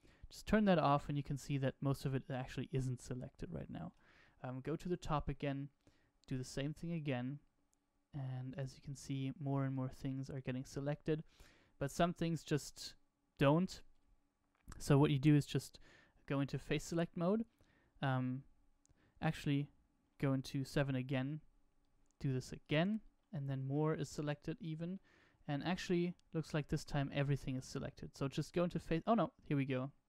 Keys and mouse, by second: 1.5-2.9 middle drag, 4.1 KP_7, 5.7-6.9 drag, 8.8 shift+click, 11.3-12.3 middle drag, 16.6 click, 20.4 KP_7, 21.7 click, 23.7-24.9 middle drag, 25.8-26.9 middle drag, 29.1-30.0 middle drag.